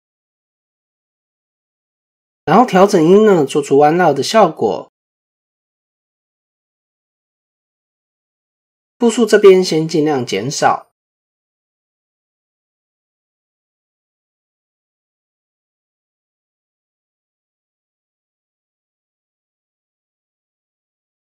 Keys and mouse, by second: 2.4-5.5 drag, 9.6 click, 9.8 click, 10.1 click, 10.8 click, 11.2 click, 11.4 click, 11.7 click, 11.9 click, 12.1 click, 12.3 click, 12.7 click, 17.9 click, 19.0 click.